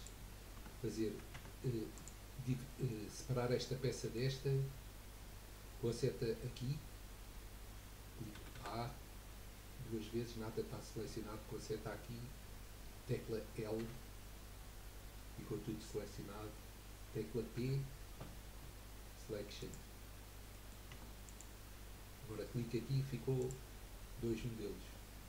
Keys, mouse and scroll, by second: 0.7 Tab, 1.5 Tab, 1.9 click, 2.6 middle click, 3.6 scroll down 2, 4.0-7.0 middle drag, 8.3 a, 8.5 a, 13.8 l, 15.2 scroll up 2, 17.5 p, 20.6 middle click, 21.0 Tab, 21.2 click, 22.9-23.4 scroll down 4, 23.4 click.